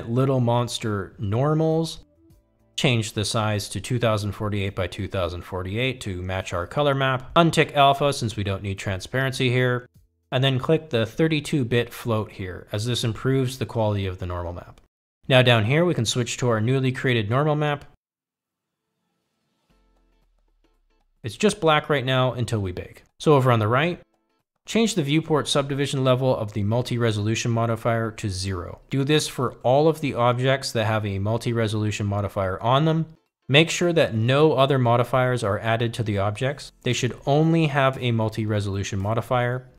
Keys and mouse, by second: 0.8-17.2 drag, 2.7 BackSpace, 20.2-22.0 drag, 26.1-29.0 drag, 31.7 click, 32.9-34.1 drag, 35.7-37.5 drag, 39.3-39.7 drag.